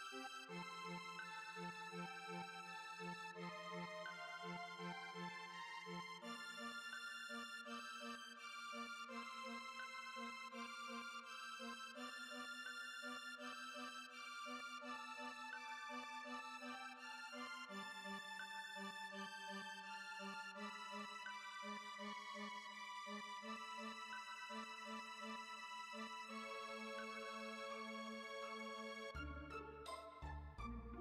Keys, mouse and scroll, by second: 0.6 click, 3.1 click, 4.4 ctrl+z, 5.0 a, 5.5 click, 9.0 click, 9.6 click, 10.0 click, 10.8 click, 11.4 middle click, 11.7-12.2 scroll up 4, 12.2 middle click, 12.5 Tab, 13.0 Tab, 13.6 KP_7, 14.0 a, 14.2 scroll down 6, 14.8 F3, 16.6 click, 18.7 scroll up 3, 19.8 click, 24.0-28.2 drag, 28.7 Tab, 28.9 middle click, 29.6 KP_7, 29.8 Tab, 30.1-31.0 scroll up 3.